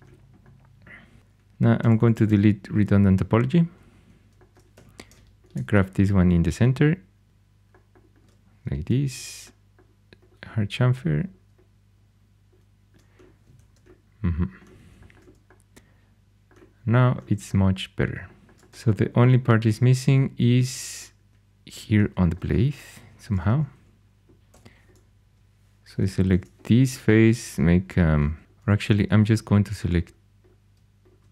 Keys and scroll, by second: 1.5-2.7 typing, 4.7 2, 23.1 shift+super+e, 24.4 3, 26.2 ctrl+2, 28.4 2.